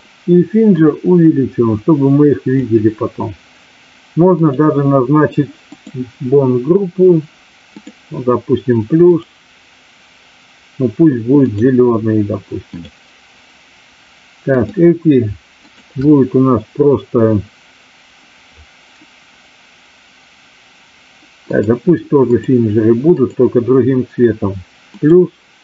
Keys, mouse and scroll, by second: 0.8 click, 5.7 click, 7.7 click, 9.0-11.5 drag, 12.7 click, 14.7 drag, 15.7 shift+click, 21.5 click, 23.1 click, 24.9 click.